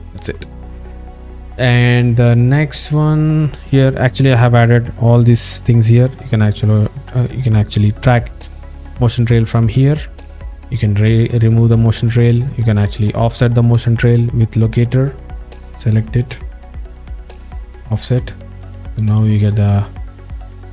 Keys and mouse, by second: 0.8 alt+middle click, 3.0 click, 4.0 alt+middle click, 9.0 click, 10.9 click, 12.0 alt+middle click, 14.5 click, 16.2 click, 18.7-19.1 alt+middle drag, 20.0 alt+middle click.